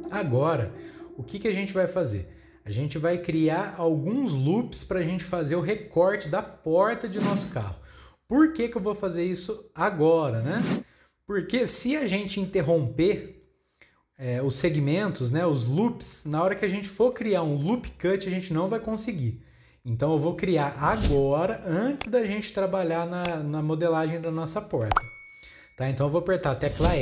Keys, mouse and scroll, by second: 10.8 click, 11.5 click, 12.1-14.4 shift+middle drag, 14.4 scroll down 1, 14.6-20.3 middle drag, 22.6 KP_3, 23.6 scroll up 2, 24.0 scroll down 2, 24.5 shift+middle click, 25.3 scroll up 1.